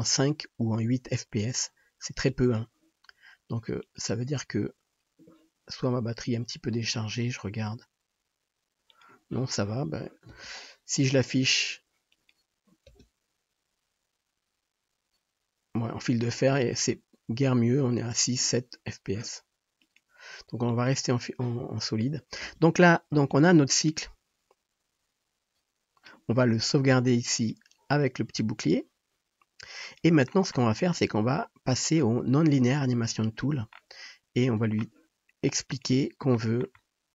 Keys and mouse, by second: 2.5 space, 12.3-20.1 drag, 13.1 space, 20.1-20.8 middle drag, 20.8 click, 21.0-23.5 middle drag, 22.6 space, 23.5-27.5 drag, 27.5-28.6 middle drag, 28.6-35.8 drag, 35.8-37.1 middle drag.